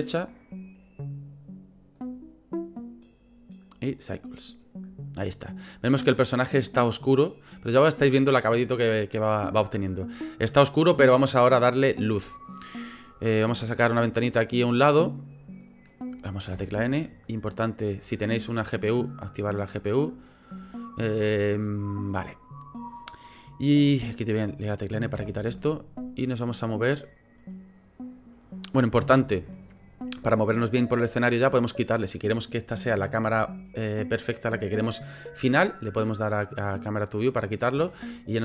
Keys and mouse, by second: 3.0-4.3 drag, 13.6-15.6 drag, 16.5 n, 17.8-19.6 drag, 25.1 n, 29.0 n, 31.3 click, 37.3 click, 37.7 n, 38.2 click.